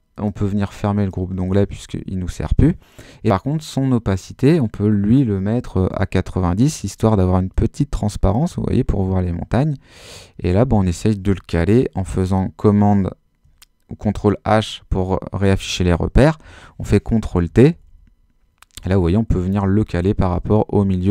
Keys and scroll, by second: 5.5-6.3 typing, 6.4 Home, 12.0 super+h, 12.8 super++, 16.5 super+t, 17.5 super+Left, 19.6 Right, 20.0 Left, 20.3 Right.